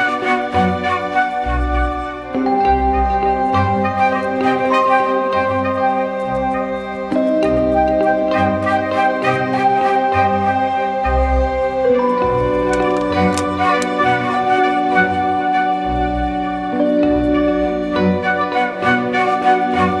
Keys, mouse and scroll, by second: 4.8 Return, 18.8 ctrl+t.